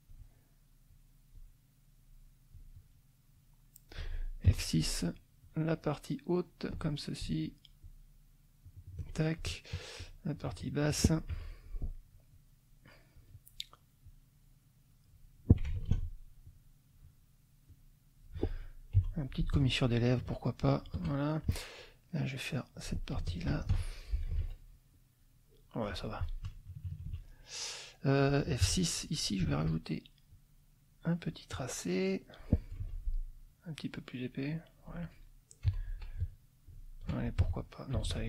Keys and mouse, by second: 0.9 click, 2.0-3.1 drag, 3.3 click, 4.5 F6, 5.4-6.9 drag, 7.8-9.2 shift+drag, 10.0-11.0 shift+drag, 11.3 F2, 11.6-13.3 shift+drag, 14.0-15.1 drag, 15.7 ctrl+alt+click, 16.4 ctrl+alt+click, 17.7 click, 19.0 F6, 19.6 shift+click, 20.7 shift+click, 21.3 shift+middle click, 22.3 click, 23.2 shift+click, 23.7 shift+F1, 24.4 ctrl+z, 26.0 F1, 26.6 KP_Subtract, 28.6 F6, 30.3-31.8 drag, 32.8 F2, 33.7-35.9 drag, 35.6 F6, 36.7 shift+click, 37.4 shift+F1, 38.1 ctrl+z.